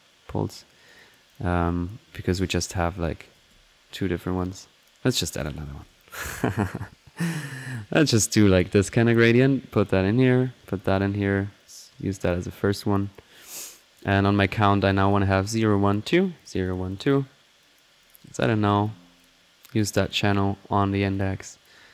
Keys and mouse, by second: 0.5 right click, 1.0 click, 2.7 right drag, 2.9 click, 3.0 right click, 3.2-4.0 typing, 4.4 click, 4.8 click, 5.4-7.3 ctrl+drag, 7.6 ctrl+click, 9.3-11.5 drag, 11.6 click, 12.2 click, 12.3-13.2 typing, 12.5 click, 13.0 click, 13.3 click, 14.0 click, 14.5-14.8 drag, 14.9 click, 16.3 drag, 16.6 click, 16.9 click, 17.6 click, 18.0-18.4 drag, 18.4 alt+n, 18.8 alt+click, 19.2 alt+click, 19.8-21.4 alt+drag, 21.5 click, 21.8 middle click.